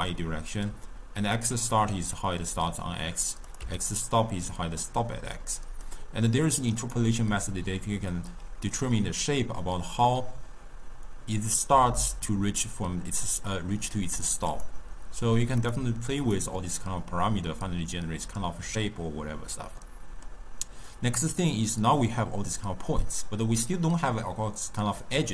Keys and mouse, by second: 3.5 click, 5.9-8.9 drag, 14.5-16.4 drag, 19.8-20.9 middle drag, 20.9 click.